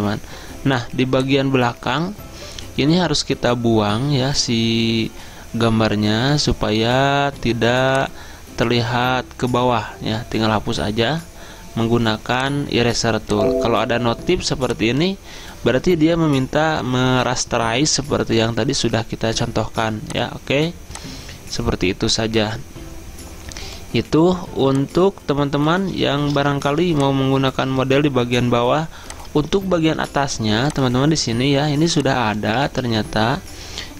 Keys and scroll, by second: 26.3 ctrl+d, 26.8 z, 30.1 v, 32.7 ctrl+z.